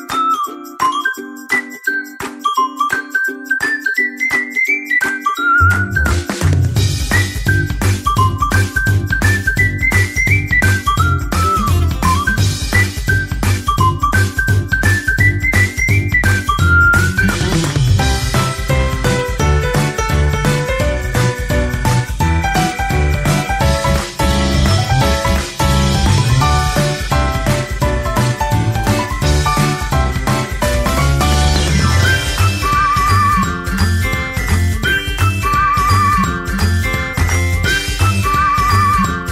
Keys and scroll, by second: 10.3 alt+BackSpace, 13.3 ctrl+d.